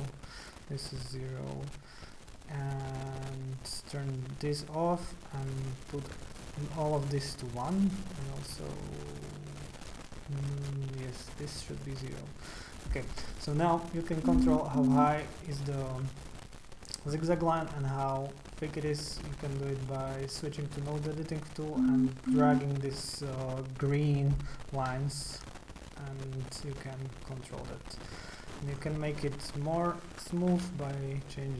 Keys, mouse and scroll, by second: 0.2 KP_0, 0.2 KP_0, 3.7 click, 4.0 click, 5.3 click, 6.1 KP_1, 6.2 KP_1, 6.8 click, 11.1 click, 11.6 KP_0, 11.7 KP_0, 12.3 click, 13.9 click, 15.1-17.0 drag, 19.8 click, 23.9-28.6 drag, 29.7 click, 30.6 KP_2, 30.7 KP_2, 31.1 click.